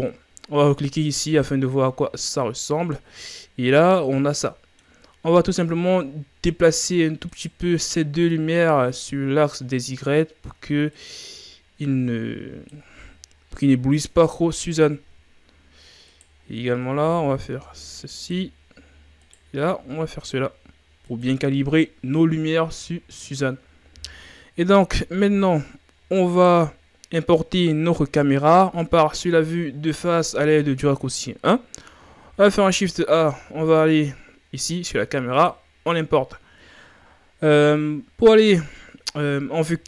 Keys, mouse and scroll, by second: 1.5 click, 2.4-5.5 middle drag, 5.5-8.5 right drag, 8.5-9.1 scroll down 3, 9.1-11.0 middle drag, 11.0-14.0 drag, 14.2 KP_7, 15.4-16.2 scroll up 1, 16.2-17.0 right drag, 17.0 r, 19.2-19.7 right drag, 19.7 r, 22.7 KP_3, 26.4-28.9 right drag, 28.9 KP_1, 32.3 shift+a.